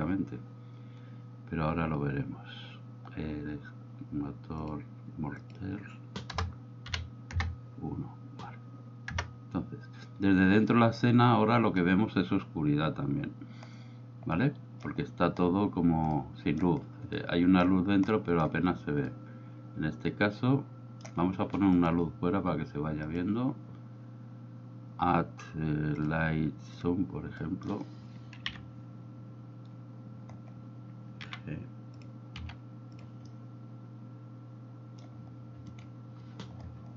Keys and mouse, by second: 4.7-7.4 drag, 9.2 KP_0, 14.4-14.9 middle drag, 16.3-16.7 middle drag, 17.2-17.7 middle drag, 18.2 middle drag, 19.2-21.1 middle drag, 21.8 click, 23.2-26.9 drag, 27.5 middle drag, 28.6 KP_3, 31.3 g, 32.0 drag, 32.5 r, 33.0 click, 33.5-35.1 middle drag, 35.8 right click.